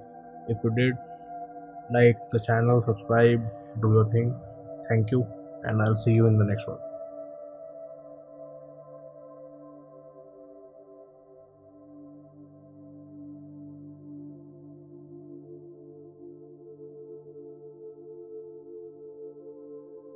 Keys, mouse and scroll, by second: 1.3 scroll, 4.5 middle click, 4.6 middle click, 4.6 middle click, 6.1 middle click.